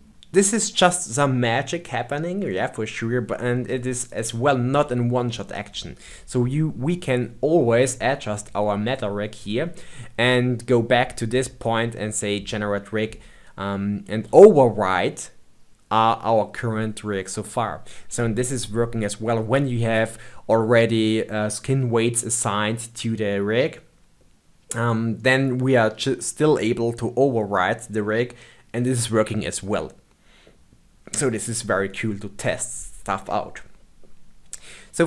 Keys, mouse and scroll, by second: 4.0 click, 5.7-7.1 scroll down 3, 34.7-35.0 scroll down 2.